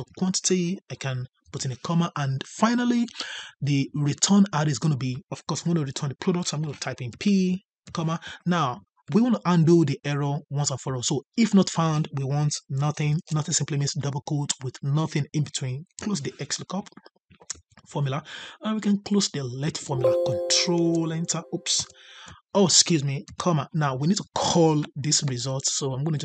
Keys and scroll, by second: 20.7 ctrl+Return.